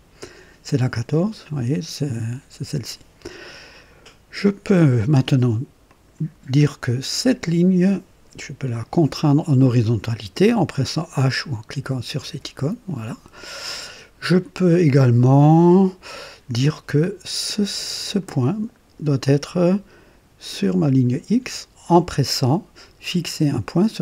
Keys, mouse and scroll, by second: 5.9 click, 12.3 h, 18.0 click, 20.8 click.